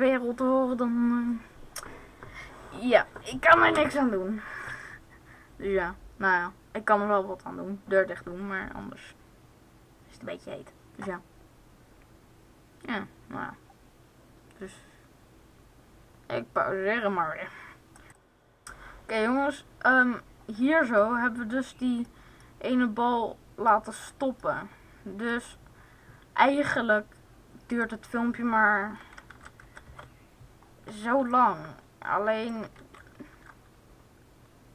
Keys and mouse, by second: 17.9 Left, 28.7-30.2 drag, 31.4-33.0 drag, 32.5 alt+a.